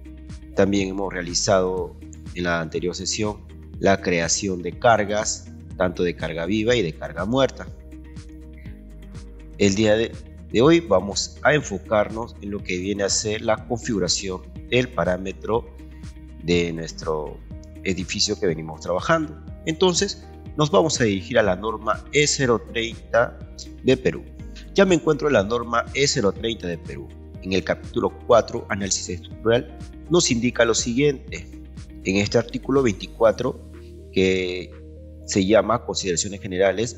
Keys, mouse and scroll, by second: 32.1 click.